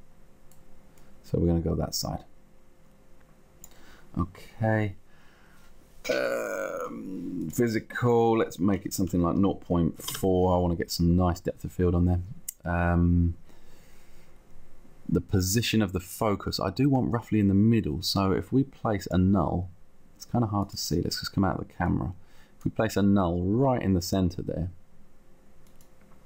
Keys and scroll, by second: 8.6 0, 10.3 Return, 11.4 Return.